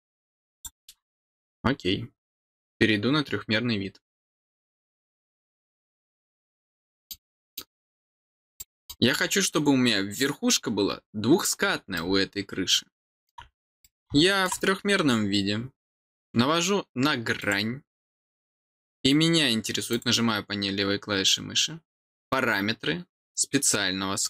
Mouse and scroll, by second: 0.5 click, 5.4 click, 5.7 click, 6.7 middle click, 7.4 middle click, 7.8-8.3 scroll down 3, 8.5 middle click, 9.2 scroll down 1, 11.6 middle click, 11.9-13.2 middle drag, 13.8 middle click, 17.3 click, 19.9 click.